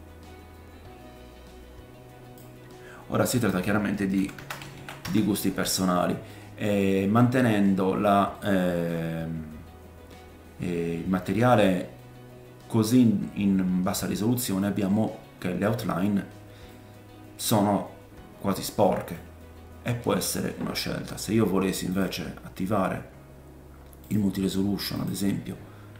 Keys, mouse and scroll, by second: 3.4 click, 6.3 middle click, 7.7-8.3 scroll up 1, 8.3 middle click, 11.3-23.4 middle drag, 16.0-16.7 scroll down 1, 23.4-25.9 drag.